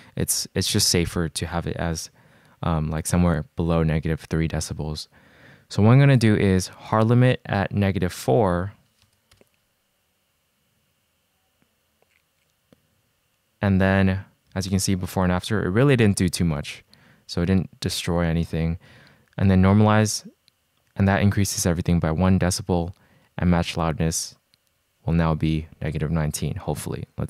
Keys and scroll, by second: 7.0 g, 8.4-9.3 typing, 14.7 super+z, 15.3 shift+super+z, 15.9 super+z, 16.8 shift+super+z, 19.0 c.